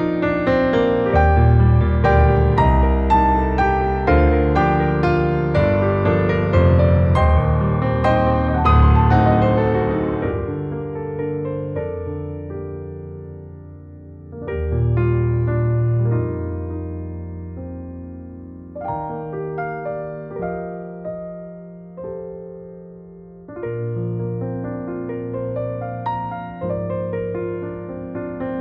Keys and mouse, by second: 1.2 KP_7, 2.7 click, 2.9 click, 3.4 alt+middle click, 4.4 shift+click, 4.6 shift+click, 5.0 shift+click, 5.1 shift+click, 5.5 shift+click, 6.0 KP_7, 6.7 s, 8.2 click, 8.5 alt+middle click, 10.1 2, 10.4 click, 10.5 click, 11.0 KP_7, 11.7 s, 13.6 click, 14.5 Tab, 14.9 alt+middle click, 15.9 click, 16.4 KP_7, 17.3 Tab, 18.5 click, 22.4 ctrl+r, 23.7 click, 24.2 ctrl+r, 25.7 click, 28.4-28.6 alt+middle drag.